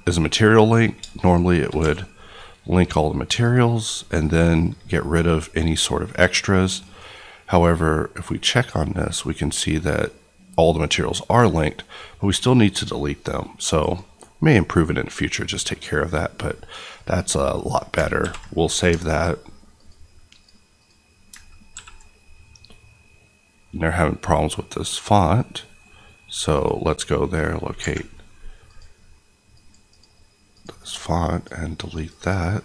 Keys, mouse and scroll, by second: 1.7 q, 3.4 click, 9.8-10.4 scroll up 1, 10.4-10.8 scroll down 1, 10.8-11.3 scroll up 1, 12.1 right click, 13.8 click, 17.5 middle click, 18.2 ctrl+s, 19.7 click, 21.7 ctrl+s, 26.5 click, 27.2 right click, 27.7 Escape, 28.6 click, 29.9 click, 30.5 click, 30.7 right click, 31.4 click, 32.0 click.